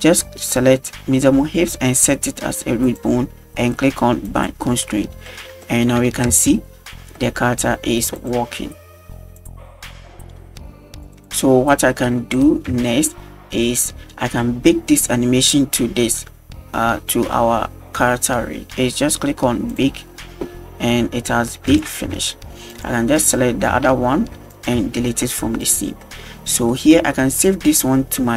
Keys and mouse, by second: 2.9 click, 4.3 click, 5.3 middle click, 5.6 shift+middle drag, 6.3 space, 7.2-7.5 shift+middle drag, 8.2 click, 9.4 drag, 11.1 space, 11.3 click, 12.9-14.3 shift+middle drag, 19.7 drag, 21.7 right click, 22.2 g, 23.2 right click, 23.7 g, 24.8 x, 25.7 right click, 26.0 middle drag, 26.7 shift+middle click, 27.5 click.